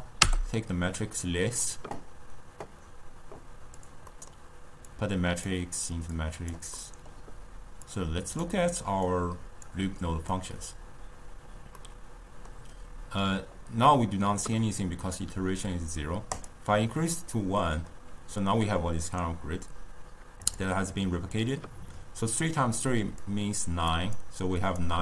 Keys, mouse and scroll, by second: 4.2-5.0 middle drag, 5.0 click, 6.2-6.8 drag, 6.8-8.0 middle drag, 8.0 click, 9.2 click, 10.4 click, 11.9-15.0 middle drag, 16.5-17.5 drag, 17.5-20.5 middle drag, 20.5-23.0 drag, 23.0-25.0 typing, 23.3 click, 24.3 click.